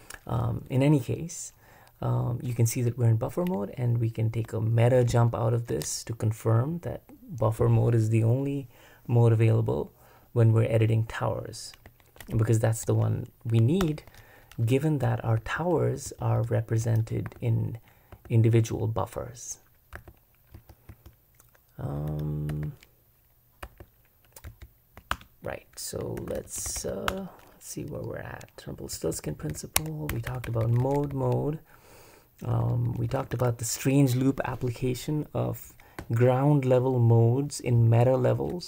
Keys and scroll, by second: 5.7 super+Escape, 13.8 super+Return, 15.4-18.1 typing, 19.9-20.9 typing, 22.1-24.5 typing, 25.1 super+Return, 26.2 super+b, 26.4-27.2 typing, 28.9-31.1 typing, 32.4-33.8 typing.